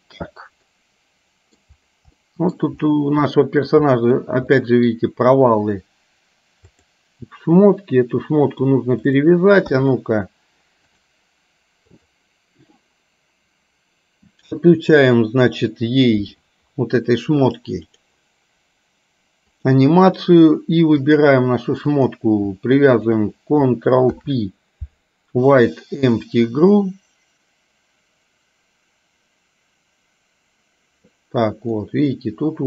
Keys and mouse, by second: 0.8 middle click, 2.3 middle click, 3.4 middle click, 4.0 middle click, 4.5 middle click, 6.8 click, 8.5 click, 9.8 KP_1, 11.0 click, 12.1 click, 17.9 click, 19.6 click, 23.0 shift+click, 24.1 ctrl+p, 31.9-32.6 middle drag.